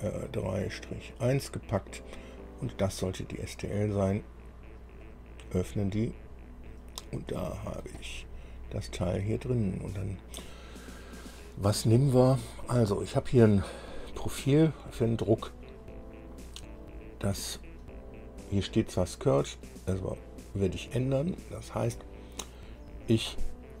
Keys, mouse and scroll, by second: 0.7 click, 2.8 click, 5.1 click, 7.4 scroll up 2, 7.5-10.6 drag, 7.5-10.6 right drag.